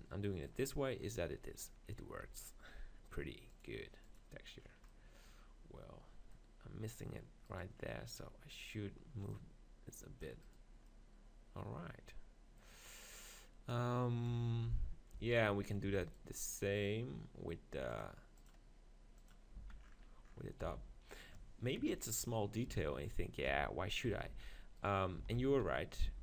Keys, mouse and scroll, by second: 2.2 Tab, 4.7 middle click, 7.0-7.3 scroll up 1, 7.5-9.5 right drag, 9.3-11.0 drag, 10.5 right click, 10.9 middle click, 11.9 right click, 12.5-14.3 middle drag, 14.3 KP_7, 15.1 z, 15.8 z, 17.6 click, 18.4 right click, 19.2 click, 19.6 z, 19.8-20.8 middle drag, 20.6 g, 21.2-23.0 drag, 22.8-26.1 typing, 23.4 click.